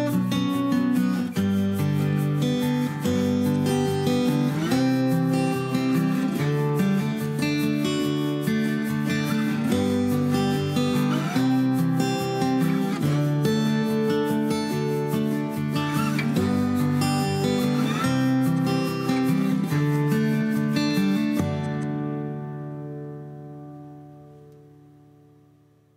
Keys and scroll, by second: 4.9 m, 8.0 q, 10.3-11.2 typing, 13.0-15.8 typing, 16.2 ctrl+z, 16.4 ctrl+z, 16.9 Delete, 19.6 m, 19.8 space, 21.2-22.9 typing.